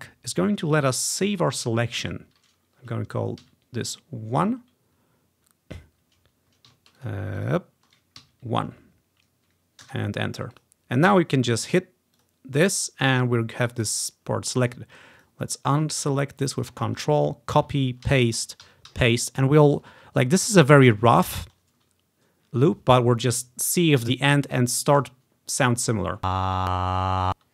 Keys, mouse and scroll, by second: 3.5 1, 7.1 ctrl+click, 7.4 ctrl+click, 8.0-9.1 ctrl+drag, 8.3 1, 9.9 Return, 10.6-14.3 drag, 15.2-16.5 ctrl+drag, 17.8 ctrl+c, 17.8-19.7 ctrl+drag, 18.1 ctrl+v, 18.7 Right, 19.0 ctrl+v, 20.2 ctrl+scroll up 2, 20.9-22.4 drag, 22.5-23.8 drag, 26.3 space, 27.4 space.